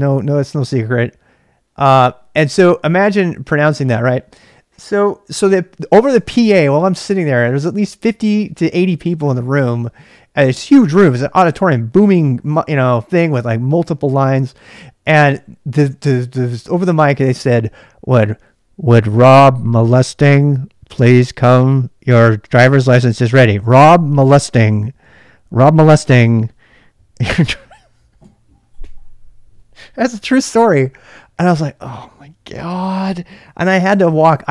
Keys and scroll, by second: 0.0-0.3 typing.